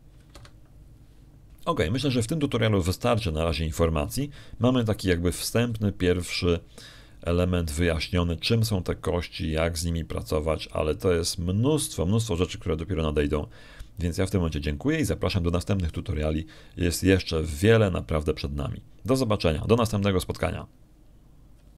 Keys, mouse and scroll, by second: 1.2 r, 5.6 middle click, 5.6-6.0 scroll down 2, 6.2 scroll down 2, 6.6-8.1 shift+drag.